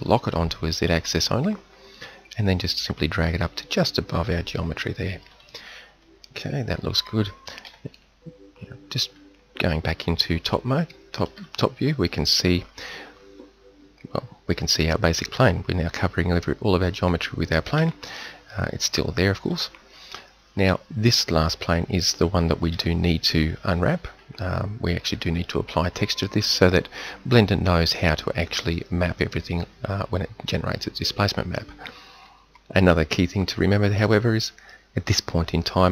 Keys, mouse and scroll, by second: 7.7 KP_7, 17.8 z, 19.5 z, 22.8 t, 25.6-25.9 middle drag.